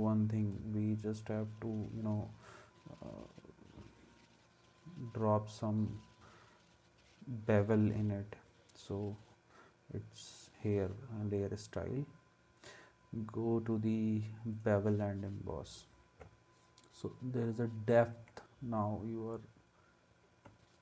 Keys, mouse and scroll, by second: 20.5 space.